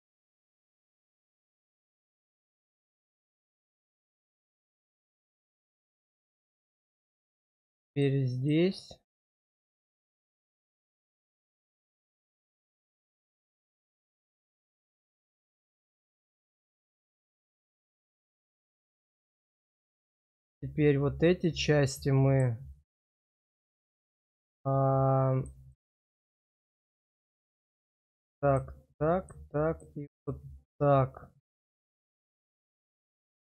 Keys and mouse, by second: 3.4 middle click, 4.8 shift+click, 5.7 middle click, 6.3 shift+middle click, 7.1 click, 8.3 ctrl+click, 9.5 ctrl+click, 10.3 ctrl+click, 11.4 ctrl+click, 12.0 middle click, 14.4 middle click, 18.0 middle click, 19.9 middle click, 21.4-22.4 middle drag, 23.2-24.4 middle drag, 25.3 click, 25.7 middle click, 27.1 middle click, 28.0 shift+click, 29.1 shift+click, 30.2-33.4 middle drag.